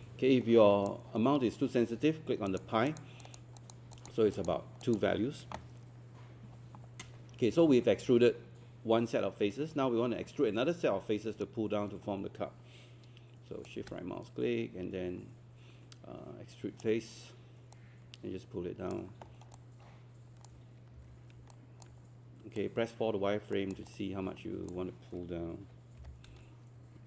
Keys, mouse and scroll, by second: 17.7 click, 19.3 alt+scroll down 1, 21.0 alt+4, 21.5 alt+click, 23.9 alt+click, 26.0 5.